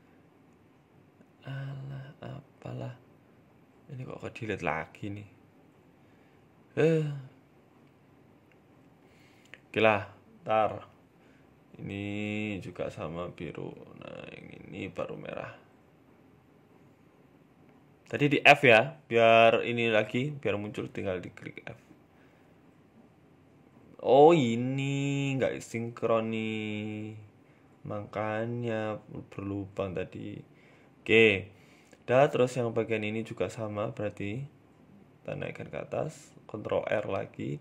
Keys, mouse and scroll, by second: 3.9 middle click, 4.3-5.2 scroll down 3, 4.5 middle click, 5.2 alt+h, 5.7 middle click, 6.1 scroll down 1, 6.2-6.9 scroll up 3, 6.4 middle click, 7.1 middle click, 8.0 a, 8.1 a, 8.5 alt+shift+Right, 10.0 click, 10.5 right click, 10.9 alt+shift+Right, 12.0 click, 12.8 right click, 13.0 alt+shift+Right, 14.4 click, 14.8 click, 15.1 Tab, 15.5 middle click, 16.1 middle click, 16.3 Tab, 16.5 middle click, 16.9 scroll up 1, 17.5 right click, 18.1 shift+right click, 19.7 right click, 19.9 shift+right click, 20.8 alt+m, 22.1 m, 23.6 alt+shift+Right, 24.2 right click, 24.4 alt+shift+Right, 26.5 alt+shift+Right, 26.5 click, 26.9 scroll down 2, 27.0 Tab, 27.3 middle click, 27.7 middle click, 28.3 right click, 28.5 Tab, 28.8 Tab, 29.1 right click, 29.3 Tab, 29.9 middle click, 30.6 ctrl+r, 32.7 KP_3, 33.3 shift+middle click, 33.6-33.9 scroll up 3, 34.2 g, 36.0 ctrl+r.